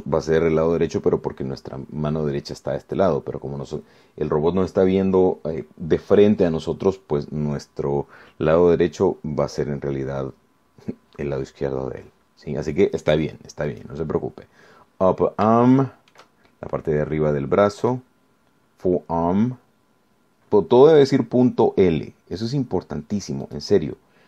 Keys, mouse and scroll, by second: 14.9 click, 16.3 scroll down 2, 16.9 shift+middle click, 19.1 click, 23.6 click.